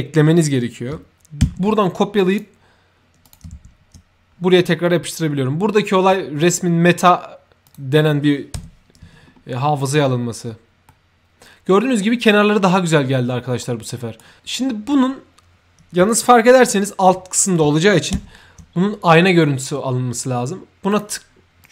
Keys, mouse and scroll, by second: 1.6 ctrl+c, 2.2 click, 2.3 c, 3.1 click, 3.7 ctrl+v, 7.6 click, 8.6 ctrl+Escape, 9.2 ctrl+middle click, 10.0 scroll up 1, 10.8-11.9 ctrl+middle drag, 13.5-14.1 ctrl+right drag, 14.3 ctrl+right click, 14.6 ctrl+middle click, 18.1 ctrl+f, 20.8 click, 21.5 click.